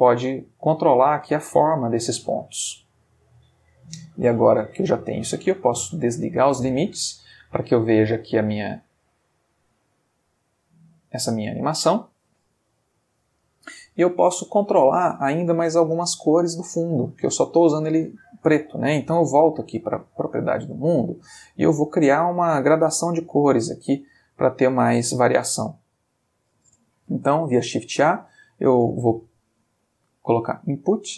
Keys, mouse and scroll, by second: 1.5 space, 6.2 click, 7.1 space, 18.0 space, 18.8 click, 20.0 click, 24.0-24.7 drag, 26.1 click, 27.1 shift+a.